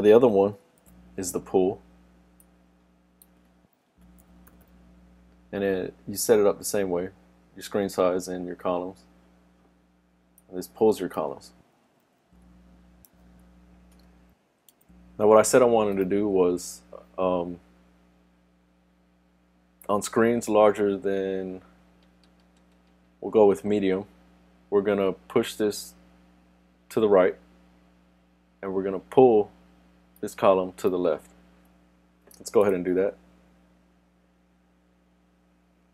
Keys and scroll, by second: 0.8 shift+super+d, 14.7 super+s.